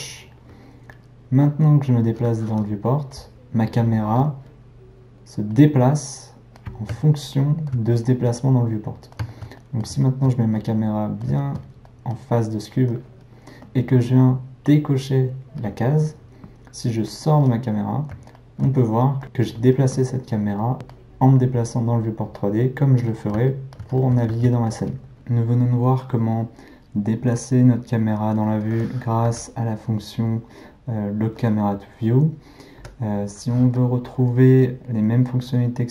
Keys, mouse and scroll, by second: 1.5-15.6 middle drag, 15.6 click, 17.1-19.6 middle drag, 20.7 middle click, 22.4-25.1 middle drag, 29.3 n, 30.3 click, 32.8 n.